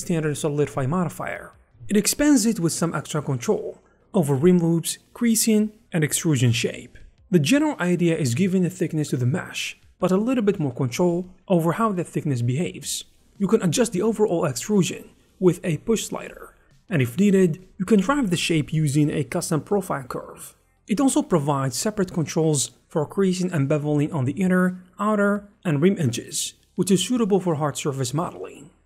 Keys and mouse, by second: 0.0 Tab, 0.0 ctrl+r, 1.0 click, 1.8 click, 2.1 Tab, 2.2 1, 2.4 click, 2.6 click, 2.8 shift+click, 3.3 ctrl+shift+e, 3.5 ctrl+shift+e, 3.5 click, 3.7 Tab, 4.1 click, 4.5 click, 4.7 click, 5.2 click, 5.6 click, 5.9 click, 6.5 click, 6.7 click, 7.8 shift+click, 8.6 click, 9.5 click, 10.2 click, 10.6 click, 11.2 shift+click, 12.0 click, 13.7 click, 14.8 click, 17.2 click, 17.4 click, 17.6 shift+middle click, 18.2 e, 19.0 shift+middle click, 20.2 click, 22.3 click, 23.7 ctrl+shift+middle click, 24.2 click, 26.4 click, 27.1 alt+shift+z.